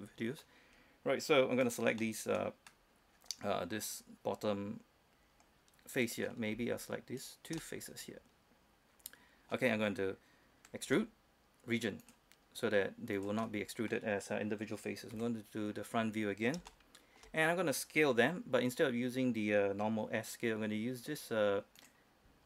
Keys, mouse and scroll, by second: 0.7-1.5 scroll down 1, 1.9 right click, 2.3-6.8 middle drag, 7.5 shift+right click, 7.9-10.6 middle drag, 11.2 e, 12.3 click, 13.7 middle click, 15.4 KP_1, 16.0-16.9 scroll up 1, 17.0 shift+middle click, 22.1-22.4 drag.